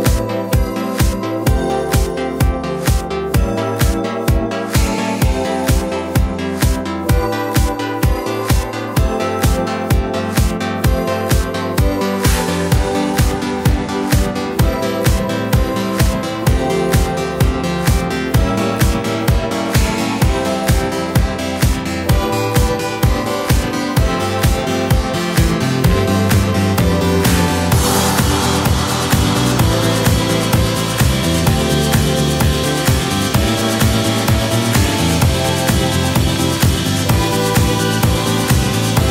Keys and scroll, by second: 39.0 BackSpace.